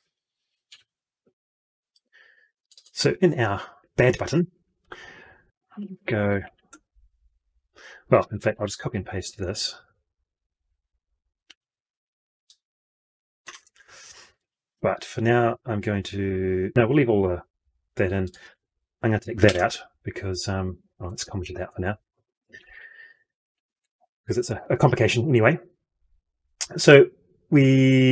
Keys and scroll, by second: 0.6 F12, 11.3 ctrl+c, 13.4 ctrl+v, 19.3 ctrl+y, 20.9 ctrl+z, 22.4 ctrl+/.